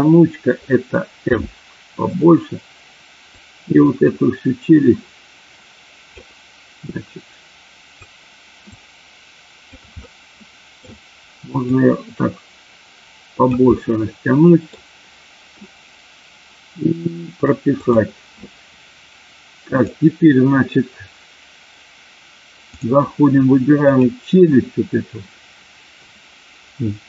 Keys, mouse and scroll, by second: 1.3 f, 3.4-6.0 drag, 6.8-7.9 drag, 8.7-9.8 drag, 10.0 middle click, 11.7-13.4 drag, 13.8-14.8 middle drag, 17.8 click, 19.7-22.9 drag, 23.7 click.